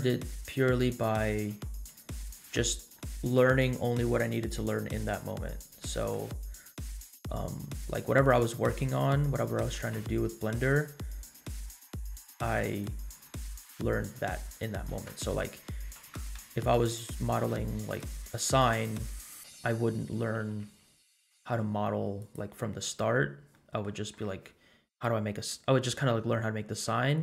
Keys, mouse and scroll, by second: 0.1 Tab, 0.8 Tab, 1.5 ctrl+r, 5.8 middle click, 7.5 3, 7.8 click, 8.9 middle click, 9.8 g, 14.1 e, 16.0 s, 18.1 scroll up 1, 18.4 middle click, 18.8 scroll down 2, 19.6 scroll up 2, 20.4 g, 22.8 scroll down 2, 23.5 middle click.